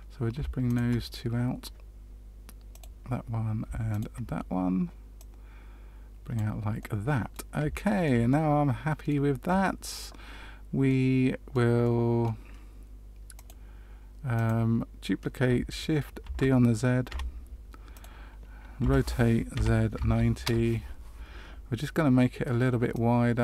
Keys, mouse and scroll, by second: 0.6 shift+click, 2.7 click, 3.9 shift+click, 5.1 click, 6.7 middle click, 7.7 shift+middle click, 8.2 middle click, 10.8 middle click, 11.8 middle click, 13.3 click, 14.3 click, 16.2 shift+d, 18.7 r, 22.9 click.